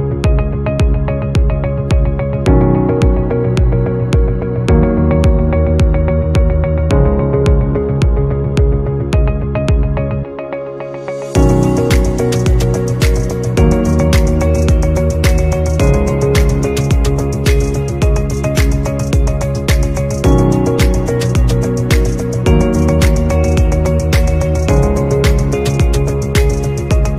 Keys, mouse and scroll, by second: 16.0 right click, 18.7 right click, 22.2 right click.